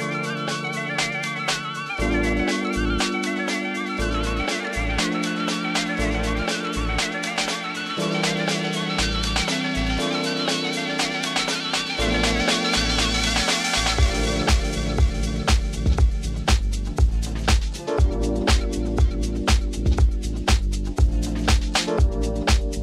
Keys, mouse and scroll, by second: 0.5 click, 2.4 click, 3.4 Tab, 4.3 alt+a, 6.4 click, 7.0 shift+click, 8.7 g, 8.8 x, 10.3 click, 10.6 Tab, 12.4-13.8 drag, 15.2 click, 15.6-16.7 typing, 15.7 click, 16.2 drag, 16.6 click, 18.6 click, 20.6 click, 20.9 click, 21.6 click.